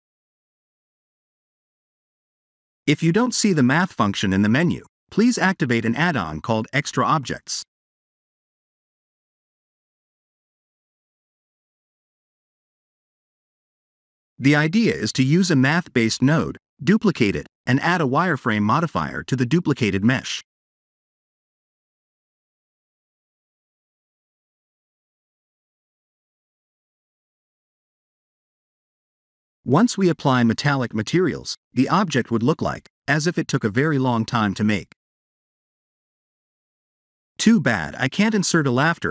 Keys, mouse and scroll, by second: 0.7 click, 1.6 KP_Decimal, 2.3 shift+a, 14.6 KP_Decimal, 15.4 middle click, 16.7-17.1 scroll down 3, 17.1 middle click, 19.6 click, 23.2 click, 24.3 shift+d, 26.4 click, 26.9 click, 29.8 scroll up 4, 30.4 middle click, 32.2 click, 33.7 click, 37.6 click, 38.7 click.